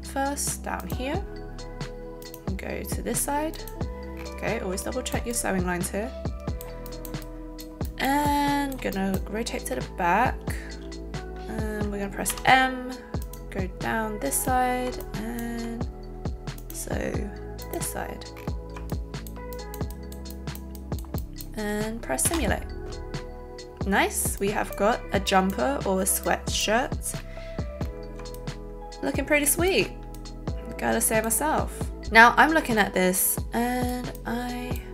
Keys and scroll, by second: 10.5 a, 12.2 m, 22.2 alt+space.